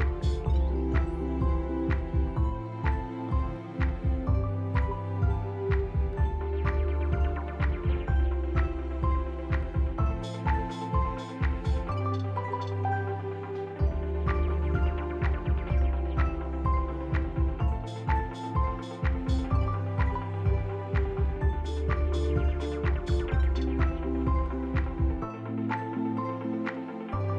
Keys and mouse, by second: 1.4 Tab, 1.9 Tab, 2.9 r, 10.9 Tab, 11.5-13.2 drag, 13.4 x, 15.7-16.9 drag, 17.4 click, 18.3 click, 18.8 x, 21.5 s, 22.2 Tab, 22.6 Tab, 23.5 Tab, 25.3 click, 25.7 s.